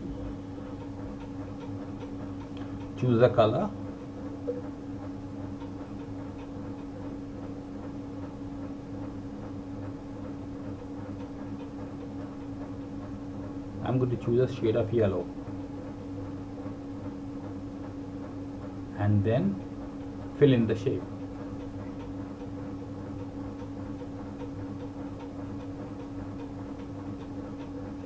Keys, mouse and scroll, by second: 11.0 click, 21.3 click, 23.9 click.